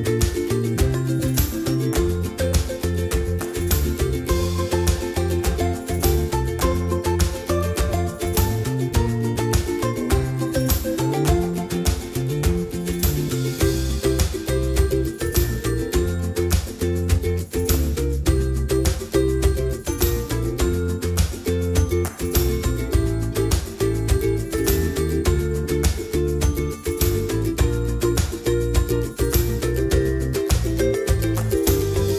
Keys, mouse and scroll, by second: 8.1 scroll up 1, 8.9-10.2 middle drag, 10.2 right click, 22.5-23.8 drag, 23.4 scroll down 1, 24.0-29.7 middle drag, 29.7 click, 30.5-32.1 middle drag.